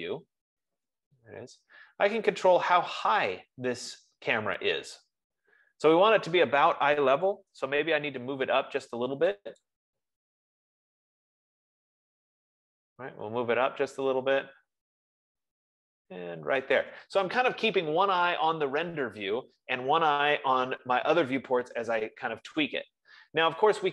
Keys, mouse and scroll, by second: 1.4 scroll, 1.6 middle click, 2.1-2.6 scroll, 2.6 scroll, 2.8 middle click, 7.2-8.3 typing, 10.1-22.5 drag.